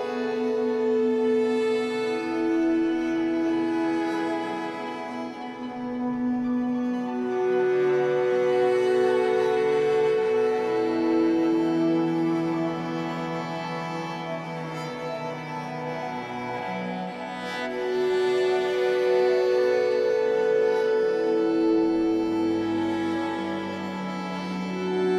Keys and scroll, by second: 0.0 Escape, 0.2 2, 4.1 ctrl+z, 5.1 Escape, 7.0 b, 12.7 Return, 15.9 Escape, 18.0 ctrl+s, 18.5 F8.